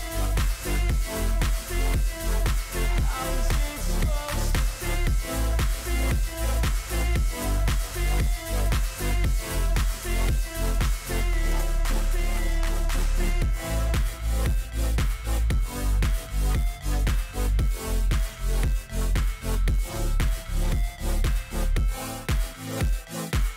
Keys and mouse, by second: 0.1 click, 0.8 click, 1.4 click, 2.2-5.0 drag, 5.7 click, 6.2 click, 8.5 click, 10.1 click, 12.5 click, 14.3 click, 15.8 click, 18.4 click, 20.8 click, 21.8 click, 23.4 alt+click.